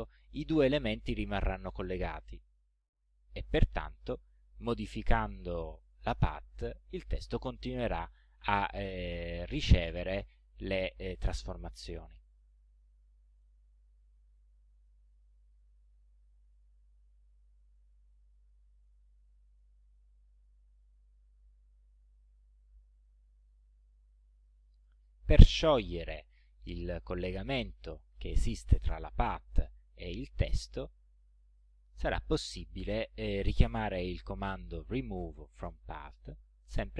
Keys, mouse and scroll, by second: 3.8 click, 5.0-6.3 drag, 8.3-10.0 drag, 12.4-13.6 drag, 14.8 click, 16.6-18.3 drag, 18.9 click, 23.4 click, 24.4 click, 31.6 click, 33.8 click.